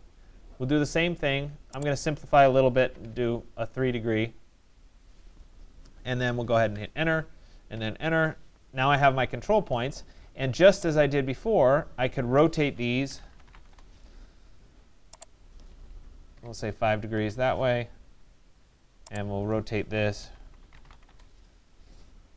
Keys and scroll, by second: 2.4 3, 3.1 Return, 13.2 Return, 16.4 5, 17.2 Return.